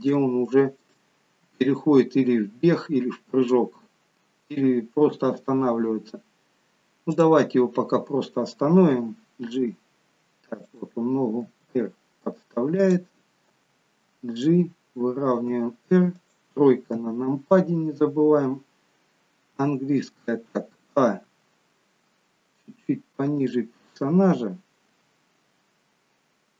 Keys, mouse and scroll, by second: 0.2 shift+middle click, 7.2 click, 9.0 g, 11.4 r, 13.5 g, 15.3 r, 17.0 KP_3, 19.6 d, 21.2 a, 23.4 click, 24.9 a.